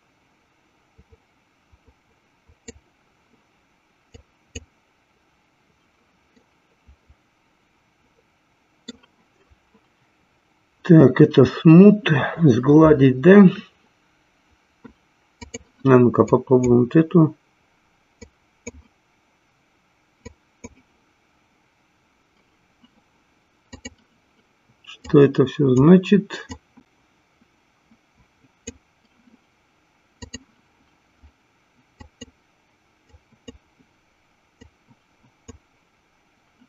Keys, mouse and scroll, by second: 0.2-3.2 drag, 4.7 click, 6.4-9.0 middle drag, 15.4 click, 16.8 click, 18.9 click, 21.0 click, 23.7 click, 25.4 click, 27.2-29.0 drag, 30.3 click, 33.5 click, 35.2 click.